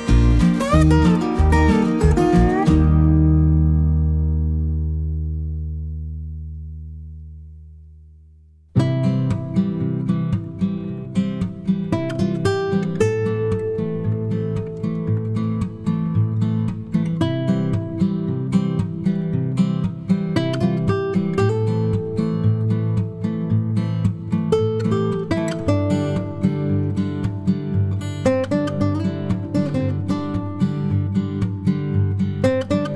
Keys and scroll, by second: 7.1 Delete, 26.8-28.6 typing, 29.6 +, 31.3 space.